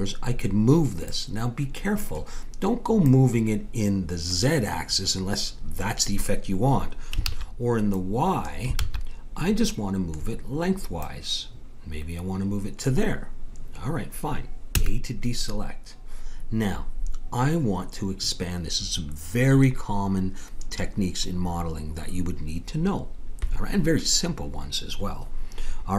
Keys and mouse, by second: 3.1-4.9 drag, 7.3 ctrl+z, 7.9-9.5 drag, 8.8 ctrl+z, 9.8-11.0 middle drag, 11.0-12.8 drag, 14.7 a.